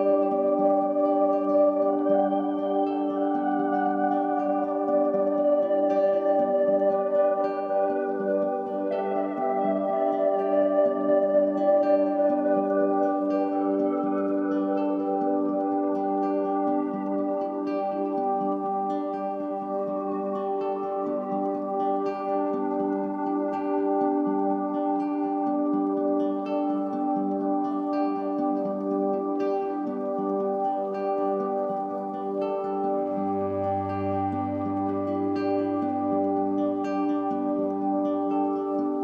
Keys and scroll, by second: 4.3 m, 14.7 ctrl+t, 29.2 Return.